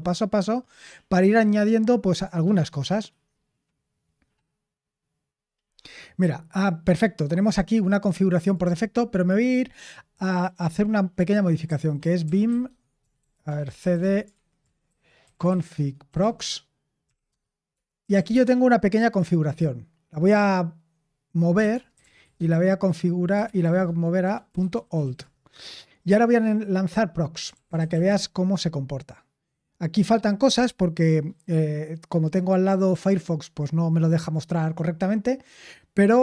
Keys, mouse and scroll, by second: 11.6-18.6 typing, 21.3-25.5 typing, 27.1-28.4 typing.